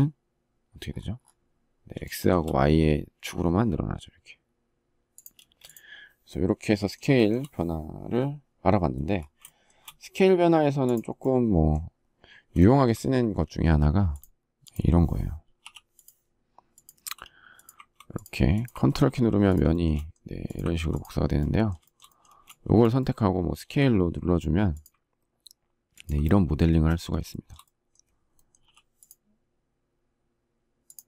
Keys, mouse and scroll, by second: 1.4 shift+middle click, 4.7 space, 6.5 shift+middle click, 11.9 shift+middle click, 19.0 shift+middle click, 21.2 shift+middle click, 21.6 space, 23.0 s, 25.3 ctrl+click, 26.0 space, 26.6 shift+middle click, 27.9 p, 30.7 space.